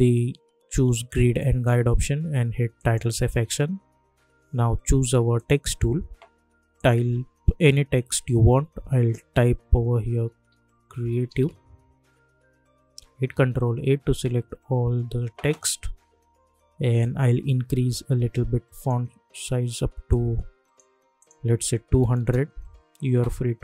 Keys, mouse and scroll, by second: 1.3 click, 5.3 click, 8.7-11.8 typing, 13.2 ctrl+a, 17.0-21.2 drag.